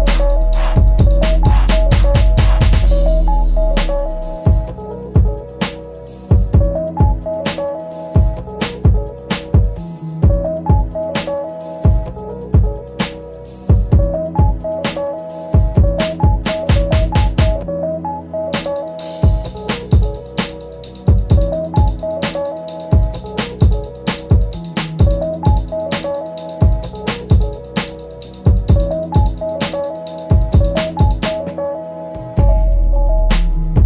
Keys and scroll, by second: 0.2 ctrl+z, 8.6 ctrl+z.